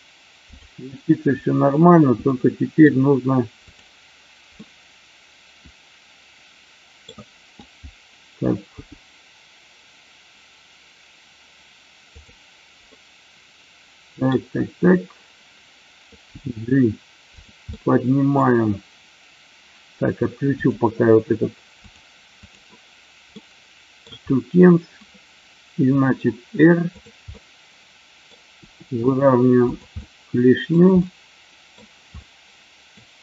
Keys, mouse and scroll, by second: 2.3 middle click, 3.7 click, 4.5-6.9 middle drag, 8.8 g, 12.0 click, 12.9-14.3 middle drag, 16.3 g, 17.3 click, 17.6 scroll up 1, 17.8-18.3 middle drag, 18.3 scroll down 1, 20.5 click, 21.8 click, 22.4 click, 23.3-24.0 middle drag, 25.8 r, 26.8 click, 27.3 middle click, 28.5 r, 29.9-30.6 middle drag, 30.9-31.6 middle drag, 32.0-32.9 middle drag.